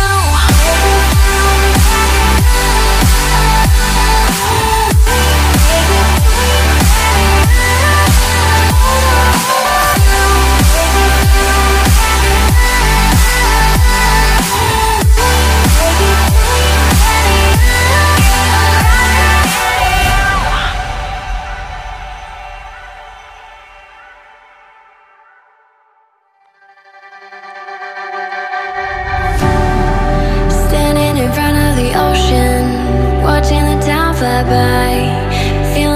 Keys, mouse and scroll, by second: 0.3 ctrl+click, 0.8 ctrl+click, 1.3 ctrl+click, 1.8 ctrl+click, 7.4 Delete, 10.1 Delete, 12.5 ctrl+v, 16.8 Delete, 17.9 double click, 18.6 scroll up 1, 19.1 ctrl+click, 19.4 ctrl+click, 19.8 ctrl+click, 20.2 right click.